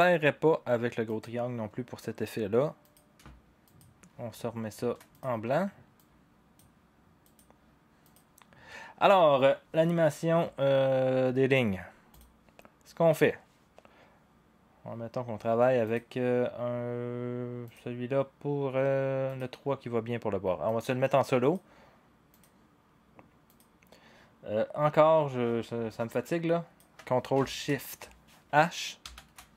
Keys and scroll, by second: 29.1 ctrl+shift+h.